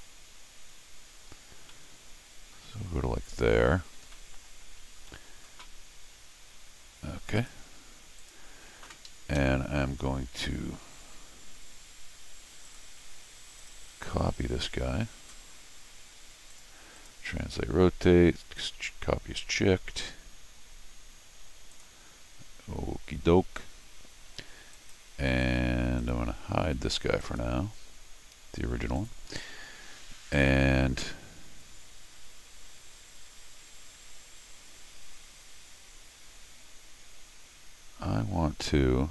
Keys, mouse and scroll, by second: 1.6 scroll down 1, 1.7 middle click, 2.9 scroll up 1, 4.1 middle click, 7.4 click, 8.2 click, 9.1 Escape, 9.2 Escape, 12.6 click, 13.6 click, 16.5 click, 17.0 click, 21.7 click, 24.7 click, 26.0 click, 27.2 click, 29.0 click, 29.7 scroll up 2, 34.2 scroll up 2.